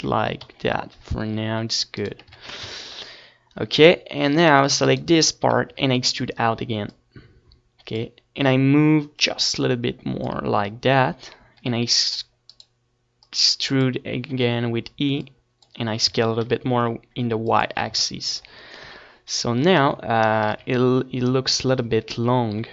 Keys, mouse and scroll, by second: 0.8-2.5 drag, 1.4 s, 3.9-7.5 typing, 6.0-7.4 right drag, 8.7-10.2 right drag, 9.2 e, 10.2 middle click, 11.0 click, 12.2-13.9 drag, 14.4 e, 15.3 right click, 15.7 middle click, 16.1-17.2 drag, 17.3-19.2 drag, 18.1 s, 19.9-21.4 drag, 19.9 z, 20.8 KP_7, 21.5 Tab, 22.2 z.